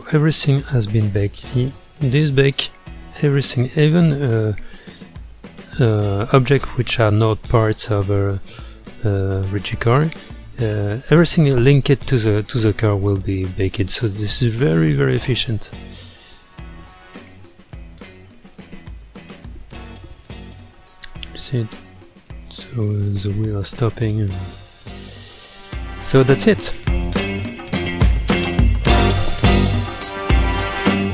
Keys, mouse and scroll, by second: 1.5-2.3 middle drag, 2.3-2.9 scroll up 2, 2.9 click, 3.7-4.1 scroll up 2, 4.3 click, 5.5-6.3 middle drag, 6.3 click, 7.2-9.1 middle drag, 9.1 scroll down 1, 9.7-10.9 middle drag, 10.9-11.2 scroll up 2, 13.2-14.6 middle drag, 14.6-15.8 drag, 15.8-16.4 middle drag, 16.4 space, 18.1-19.1 middle drag, 19.1-19.6 scroll down 1, 20.6 click, 21.1-24.7 middle drag, 24.7-25.5 drag, 25.5-28.3 middle drag, 28.3 space, 28.8-31.1 shift+middle drag.